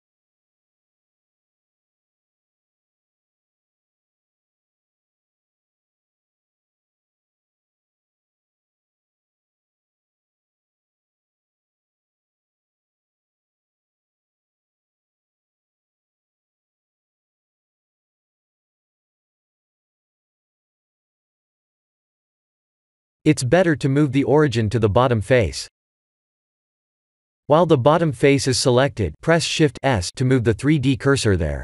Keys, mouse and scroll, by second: 1.7 click, 2.3 e, 4.1 click, 5.1 Tab, 6.6 Tab, 7.0 middle click, 7.9 Tab, 9.3 KP_3, 10.1 s, 13.3 Tab, 13.7 middle click, 15.2 Tab, 17.3 KP_7, 20.0 g, 23.7-24.0 scroll up 2, 25.1 Tab, 25.5 middle click, 26.7 scroll up 2, 28.5 shift+s, 31.0 Tab.